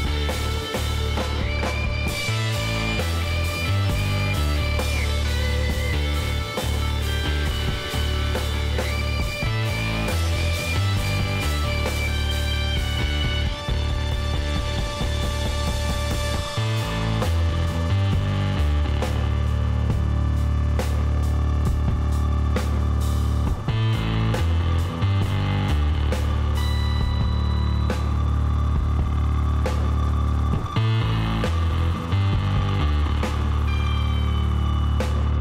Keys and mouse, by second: 0.5 z, 1.7 KP_5, 1.8-3.5 middle drag, 4.8-8.0 drag, 8.0-9.8 middle drag, 9.8 KP_5, 10.3 KP_1, 11.3 z, 13.0 ctrl+KP_Add, 16.4 x, 21.1 z, 21.2-23.1 middle drag, 23.6-26.0 middle drag, 26.0-29.3 drag, 28.5 x, 31.8 middle click, 33.1 ctrl+z, 34.4 x.